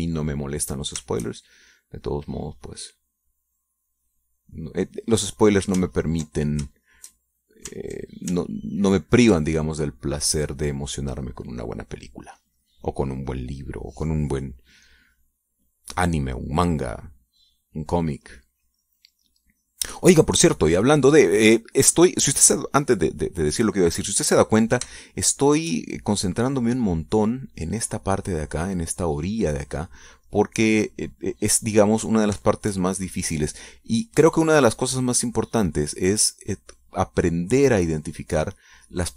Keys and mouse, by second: 0.6 ctrl+click, 1.4 shift+click, 2.5-6.8 shift+drag, 7.2 ctrl+click, 7.9 shift+click, 10.4 ctrl+click, 11.1-15.1 drag, 15.6 middle click, 17.0 middle click, 17.2 click, 18.7-20.6 drag, 21.8 ctrl+click, 22.2-23.6 ctrl+drag, 24.6 click, 26.1 shift+click, 27.3-29.9 shift+drag, 31.5-35.7 drag, 36.0-39.1 drag.